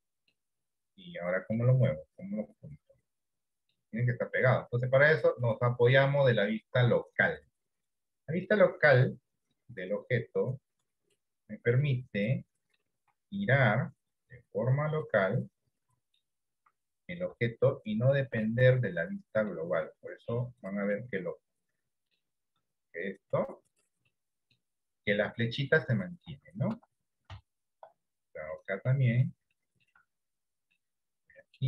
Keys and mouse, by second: 0.8 middle click, 2.1-3.9 middle drag, 5.4-7.7 drag, 8.6 middle click, 9.6-11.1 drag, 11.9 middle click, 13.6 r, 15.3-16.4 middle drag, 17.3 r, 18.8 middle click, 19.9 r, 21.0-22.2 middle drag, 24.1 middle click, 24.1 r, 25.8 middle click, 26.7 Tab, 26.9 Tab, 27.5 shift+middle click, 28.8 middle click, 29.6 shift+middle click, 30.7 middle click.